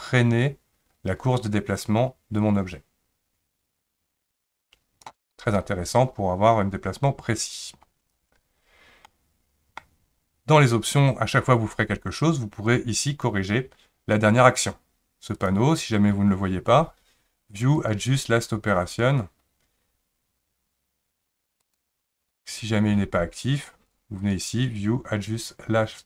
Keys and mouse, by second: 9.1 middle click, 13.1 click, 15.4 click, 17.8-21.8 drag, 23.9 click, 24.3-26.0 drag.